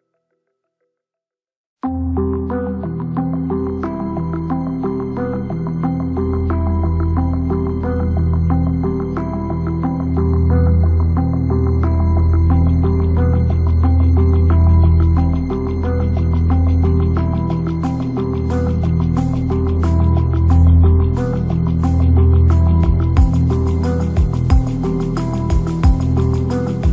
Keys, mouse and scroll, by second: 16.9 KP_0, 17.7 shift+click, 17.9 shift+a, 19.3 g, 20.0 click, 20.6 click, 20.9 click, 21.3 r, 22.3 click, 22.9 KP_0, 23.5 click, 23.9 g, 24.9 click, 25.4-26.9 drag.